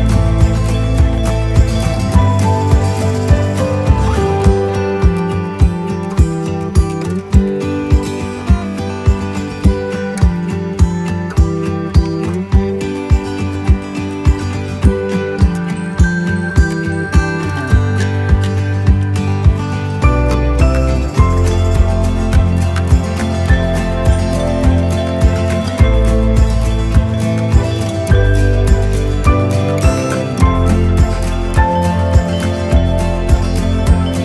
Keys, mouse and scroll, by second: 0.9 1, 1.5 5, 2.1 click, 4.3 4, 7.5-12.5 right drag, 17.1 right click, 18.5-19.6 drag, 19.9-21.1 right drag, 21.9-23.0 drag, 23.3-24.5 right drag, 25.5-27.1 drag, 27.5-30.3 right drag, 33.4 click.